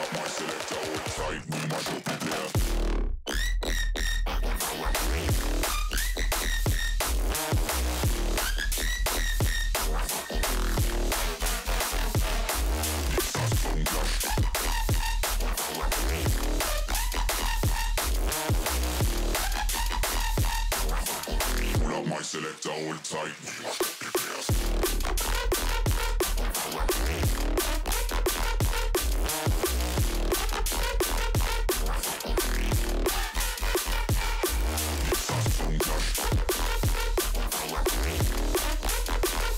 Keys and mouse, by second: 0.7 x, 0.8 x, 1.5-5.3 drag, 5.6 click, 8.3-14.2 drag, 8.8 KP_1, 13.5 r, 16.4 g, 18.4-20.0 drag, 20.0 shift+click, 21.6 ctrl+s, 22.1 shift+middle click, 22.8 click, 23.1 g, 24.1 z, 24.6 click, 25.0 middle click, 26.3 middle click, 27.8 KP_1, 28.4 shift+middle click, 28.7 shift+a, 31.1-34.0 typing, 37.1 shift+middle click, 37.5 click, 38.0 click, 38.4 middle click, 38.9-39.5 typing.